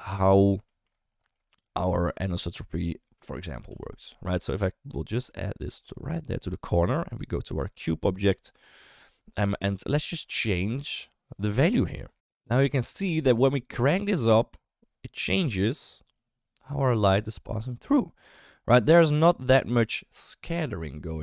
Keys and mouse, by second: 0.6 shift+middle click, 1.3 shift+middle click, 3.6 g, 6.4 shift+middle click, 7.0 click, 9.9 middle click, 12.1 ctrl+z, 14.0-21.2 drag.